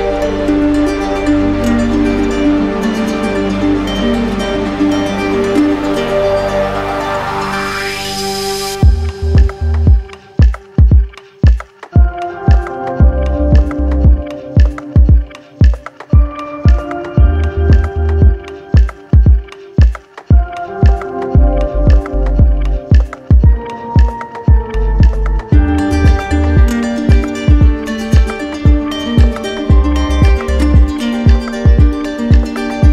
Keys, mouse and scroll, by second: 0.9 alt+right click, 2.6 alt+right click, 3.2 right click, 3.6 right click, 3.7 alt+right click, 4.1 right click, 4.8 alt+right click, 6.4 right click, 10.3 right click, 10.8 alt+right click, 11.7 alt+right click, 18.5 alt+right click, 18.9 alt+right click, 20.6 click, 22.5 click, 27.0 click, 28.1 alt+right click, 28.7 right click, 29.1 alt+right click, 29.3 alt+click, 31.9 click.